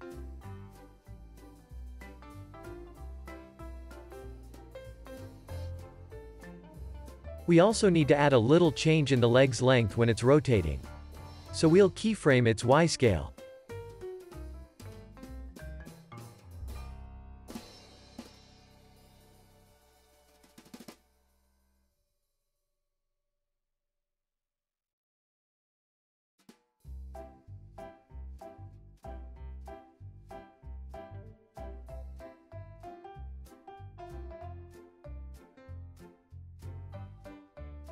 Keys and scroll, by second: 9.8 c, 15.0 x, 19.3 super+s, 19.7 z, 22.5 x, 23.1 alt+x, 25.1 z, 25.9 alt+x, 26.5 c, 27.1 z, 28.1 x, 31.2 super+s, 31.4 z, 32.0 x, 33.0 z, 34.1 x, 37.4-37.9 typing.